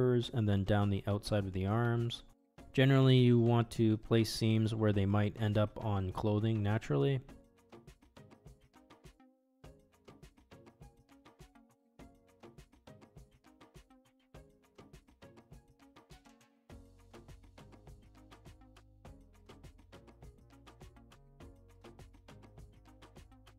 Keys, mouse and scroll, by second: 0.5 click, 1.4 middle click, 2.0 ctrl+e, 4.1 middle click, 6.6 shift+middle click, 7.2 middle click, 8.0 alt+click, 8.4 middle click, 9.0 click, 9.8-10.8 middle drag, 11.4 ctrl+e, 13.1 middle click, 14.0 middle click, 15.2 alt+click, 15.9 ctrl+e, 18.0 middle click, 19.6 ctrl+e, 21.6 middle click, 22.9 alt+click, 23.4 ctrl+e.